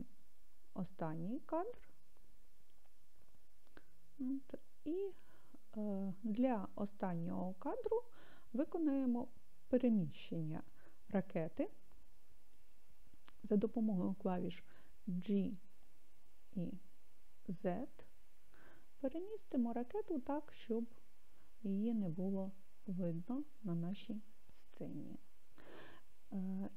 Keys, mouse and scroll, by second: 15.1 g, 17.6 z, 22.8-25.8 drag.